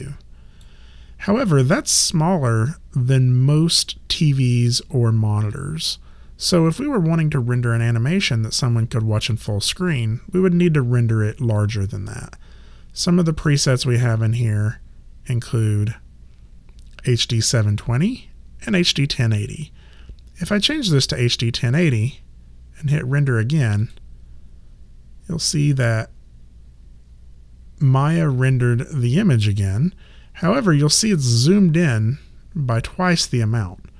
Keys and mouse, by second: 13.4 click, 20.5 click, 23.8 click.